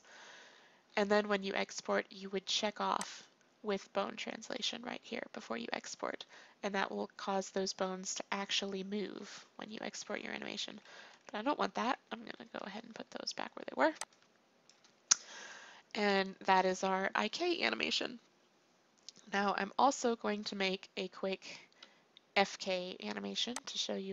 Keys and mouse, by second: 10.1 ctrl+z, 10.4 ctrl+z, 10.7 ctrl+z, 11.0 ctrl+z, 11.3 ctrl+z, 11.7 ctrl+z, 12.1 ctrl+z, 14.0-16.0 drag, 16.0-23.6 middle drag, 23.6 click.